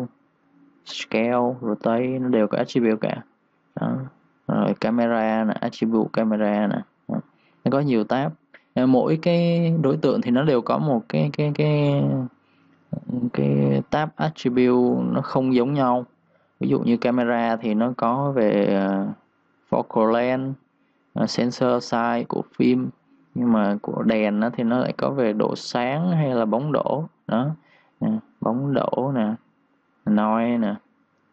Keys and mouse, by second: 0.4 click, 18.1 click, 21.8 click.